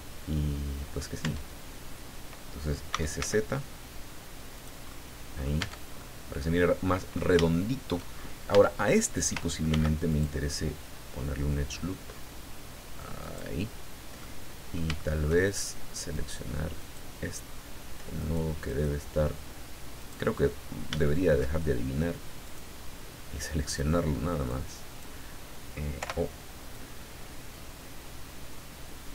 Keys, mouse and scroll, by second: 1.2 Tab, 2.9 s, 3.2 z, 4.6 click, 4.9 middle click, 4.9 click, 5.6 Tab, 6.0-7.3 drag, 7.4 shift+click, 8.2 shift+scroll up 1, 8.5 Tab, 9.7 ctrl+r, 10.1 ctrl+click, 13.2 click, 14.2 middle click, 15.0 shift+click, 16.1 right click, 16.8 right click, 18.2 right click, 18.6 right click, 20.0 click, 20.5-20.9 scroll up 1, 21.0 shift+middle click, 22.4 right click, 23.7 click, 24.5 click, 26.0 o, 26.7-28.6 drag, 28.6-29.0 scroll down 2.